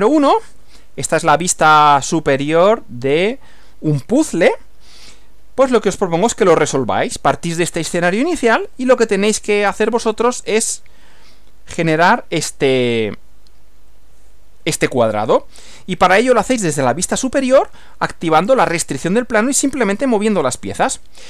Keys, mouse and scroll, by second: 8.7 Right.